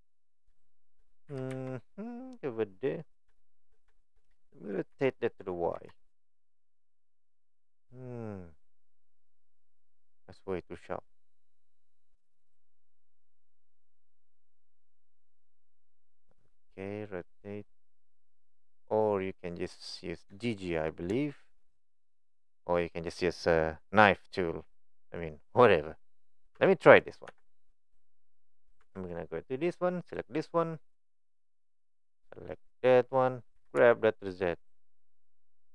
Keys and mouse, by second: 0.7 shift+middle click, 1.3 g, 3.3 middle click, 4.0 middle click, 20.4 shift+middle click, 21.2 shift+middle click, 26.5 Tab, 27.2 1, 28.8 Tab, 30.0 click, 32.5 click, 33.5 g.